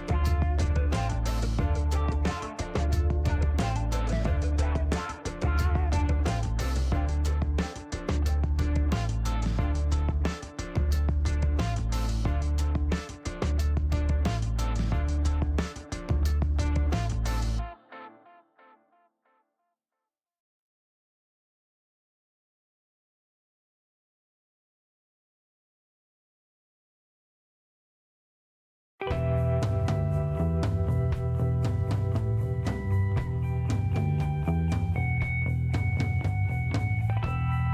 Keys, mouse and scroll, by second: 0.9 click, 1.8 click, 3.0 click, 4.4 click, 8.9 click, 10.8 6, 12.0 Return, 12.5 scroll down 2, 12.8 middle click, 13.4 scroll up 2, 14.2 click, 15.3 click, 16.1-17.0 typing, 18.1 Return, 19.5-21.7 drag, 22.1 middle click, 22.8 scroll up 2, 23.7 middle click, 27.0 click, 28.1 click, 30.3 click, 32.1 click, 33.1 click, 33.9 click, 35.2 click, 36.0 click, 36.4 right click, 36.8-37.7 middle drag.